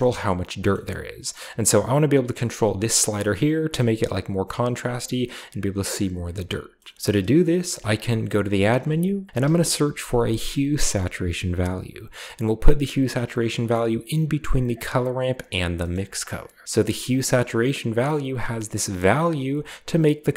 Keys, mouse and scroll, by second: 0.5 scroll up 2, 1.3-3.4 drag, 3.3 right drag, 3.8-5.9 drag, 5.8 right click, 7.7 typing, 8.5 click, 9.3-10.1 typing, 13.1 click, 15.2 click, 16.0 click, 16.6-17.1 drag, 17.3 scroll up 1, 19.4-20.3 shift+drag.